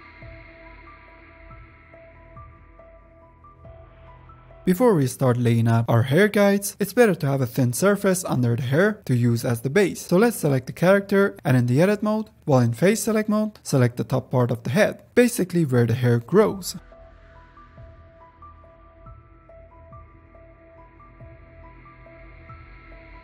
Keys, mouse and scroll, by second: 0.1 ctrl+z, 0.2 click, 0.3 middle click, 0.4 click, 0.7 ctrl+middle click, 1.3 click, 1.4 shift+middle click, 1.5 f, 1.7 f, 1.9 f, 1.9 ctrl+click, 2.6 middle click, 2.7 ctrl+click, 3.2 middle click, 3.4-4.4 ctrl+drag, 4.4 middle click, 4.5 click, 5.2 f, 5.4 click, 6.0 f, 6.1 click, 6.7 ctrl+middle click, 7.4 shift+click, 7.9 middle click, 8.1 click, 8.6 middle click, 8.8 n, 9.5 shift+h, 10.2 middle click, 10.6 Tab, 11.0-11.5 scroll up 2, 11.5 3, 12.2 click, 12.5 ctrl+z, 12.8 shift+click, 13.1-14.1 middle drag, 14.1 ctrl+shift+click, 14.5 middle click, 15.2 shift+click, 15.4 middle click, 16.0 ctrl+shift+click, 16.7 ctrl+shift+click, 16.9 middle click, 17.3 ctrl+shift+click, 17.8 shift+click, 18.6 middle click, 18.9 ctrl+shift+click, 19.2 middle click, 20.1-21.7 ctrl+shift+drag, 21.7 middle click, 22.1 shift+click, 22.7 middle click, 23.0 shift+click.